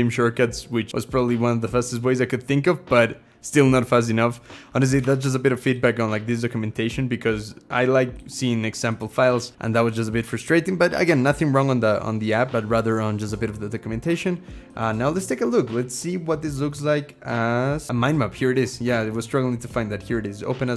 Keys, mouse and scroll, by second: 1.5-4.8 scroll, 4.8 alt+e, 4.9 alt+c, 11.8 scroll.